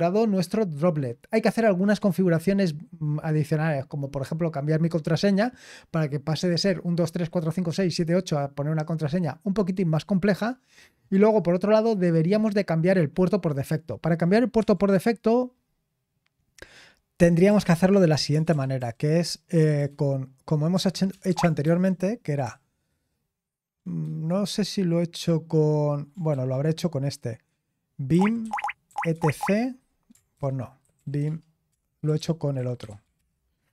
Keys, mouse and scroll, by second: 1.1-5.6 scroll up 1, 10.7-12.5 scroll up 3, 12.5-13.4 scroll up 1, 13.4 click, 14.5 s, 17.2-18.7 typing, 21.1 BackSpace, 21.2 BackSpace, 21.6 ctrl+r, 22.4 s, 24.0 ctrl+c, 26.3 ctrl+r, 27.8-29.6 typing, 30.3 Tab.